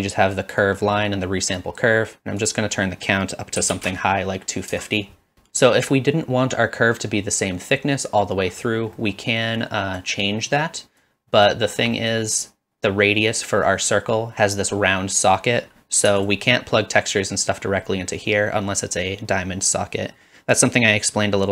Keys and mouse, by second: 0.0 drag, 0.7 click, 2.5-5.3 drag, 9.1 middle click, 9.6 click, 10.4 click, 11.4 click, 11.9 middle click, 14.3-16.4 drag.